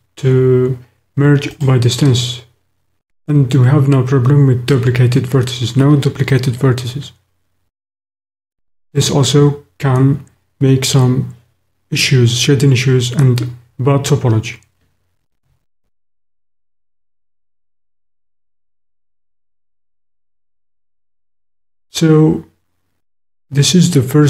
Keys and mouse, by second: 8.5 click, 15.4 shift+middle click.